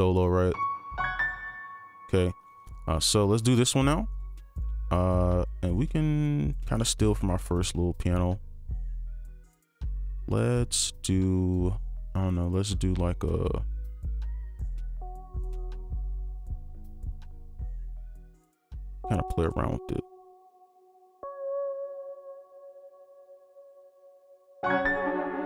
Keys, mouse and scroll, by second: 0.3 double click, 1.7 space, 2.6 double click, 11.9-13.8 scroll down 1, 16.6 alt+click, 19.4 right click, 22.7 ctrl+click, 23.7 ctrl+scroll down 1, 23.9 right click, 24.6 right click, 25.0 space.